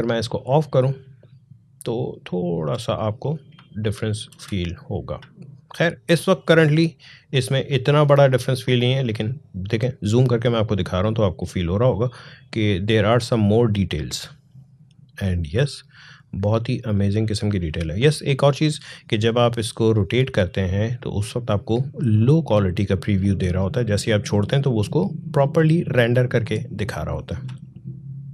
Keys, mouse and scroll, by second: 0.2 click, 2.1-2.5 alt+scroll up 1, 2.8 click, 3.5 alt+scroll up 1, 4.2 space, 4.4 click, 4.8 space, 6.1 click, 11.2 click, 15.8-18.4 drag, 18.4 space, 18.9 click, 19.2 space, 21.3-24.3 drag, 24.3 space, 24.7 click, 24.9 space, 26.6 click, 26.7 space.